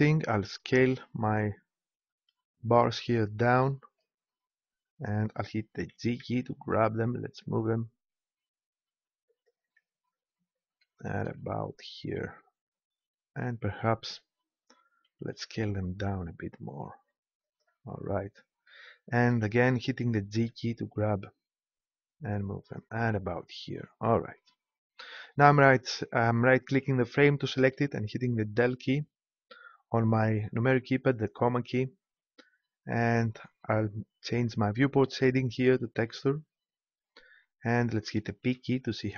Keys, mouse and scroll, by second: 0.3 s, 3.0-4.7 drag, 5.9 g, 9.4-10.4 drag, 15.1 s, 17.6 click, 20.3 g, 22.7-24.1 drag, 28.5 KP_Decimal, 34.9-36.9 drag, 38.4 p.